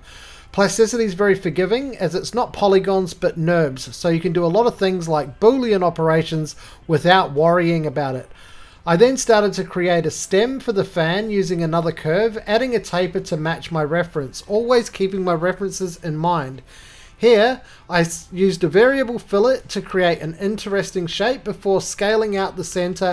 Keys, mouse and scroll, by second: 0.1-1.1 scroll, 1.1-2.8 typing, 1.4 click, 2.1 scroll, 2.3 click, 6.8 shift+middle click, 6.8 scroll, 8.2 click, 8.2 right click, 8.3 middle click, 8.4 middle click, 9.1 middle click, 9.1-9.8 scroll, 9.2 middle click, 9.3 middle click, 9.4 shift+middle click, 9.4 shift+middle click, 9.8 shift+middle click, 9.9 click, 10.2-10.6 scroll, 11.6 click, 11.6-11.9 scroll, 15.3 middle click, 19.5 click, 19.7 right click, 19.7-20.1 scroll, 20.2 middle click, 20.5 scroll, 20.5 middle click, 22.0 middle click, 22.2 click, 22.2 v.